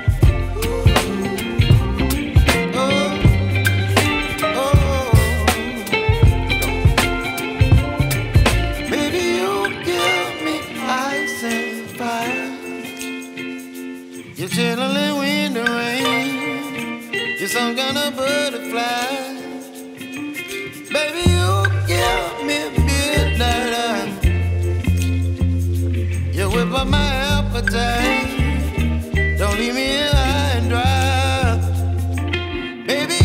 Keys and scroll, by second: 22.9 Return, 31.0 b.